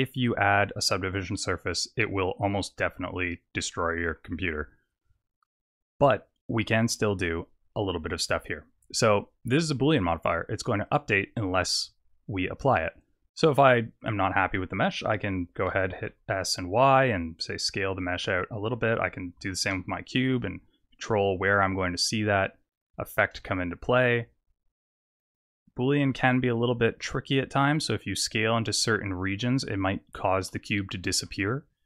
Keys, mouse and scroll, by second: 3.7 middle click, 4.5 scroll down 3, 10.8 click, 14.0 click, 15.7 s, 18.9 click, 19.3 s, 31.1 Tab.